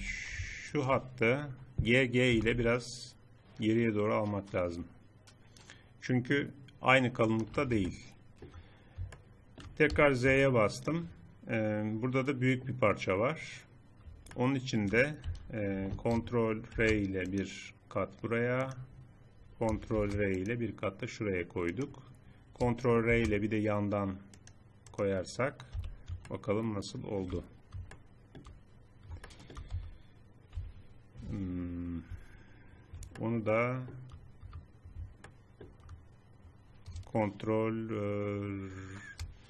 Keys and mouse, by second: 2.3 g, 7.9 middle click, 9.1 middle click, 9.8 z, 10.4 middle click, 15.3 z, 15.7 z, 16.7 ctrl+r, 19.9 ctrl+r, 22.1-24.3 middle drag, 23.0 ctrl+r, 25.8 z, 29.7 z, 30.6 z, 31.2 z, 32.2 z, 35.2 middle click, 36.0-38.2 middle drag.